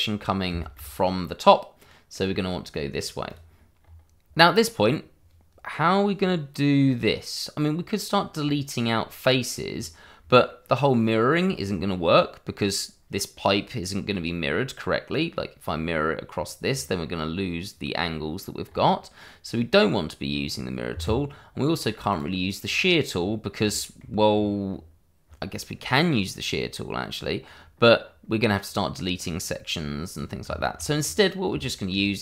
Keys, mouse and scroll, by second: 0.6 shift+middle click, 1.1 middle click, 3.2 click, 3.8-4.3 scroll up 1, 4.9 scroll down 1, 9.7-10.2 scroll down 1, 10.4 middle click, 11.4 scroll down 1, 11.7 middle click, 15.6-16.7 scroll up 1, 16.7-17.3 scroll down 1, 18.6-19.2 scroll up 1, 19.2 middle click, 22.1 click, 22.6-23.1 scroll up 1, 23.8 shift+middle click, 24.3-24.6 scroll down 1, 24.6-26.7 scroll up 1, 30.6 shift+middle click, 30.9 middle click, 31.0-31.5 scroll up 1, 31.7 shift+middle click.